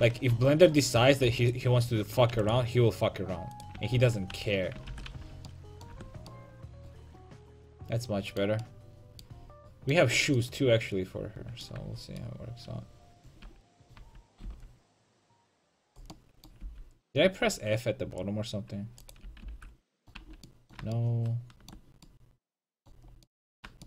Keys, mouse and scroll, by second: 0.0 middle click, 0.4 a, 1.5-5.3 right drag, 2.4 x, 4.0 ctrl+x, 4.4 a, 5.0 ctrl+t, 5.2 a, 5.3 middle click, 6.0 Tab, 11.8 Tab, 13.5 a, 14.0 a, 14.5 c, 16.7 c, 19.3 x, 19.8 f, 20.2 a.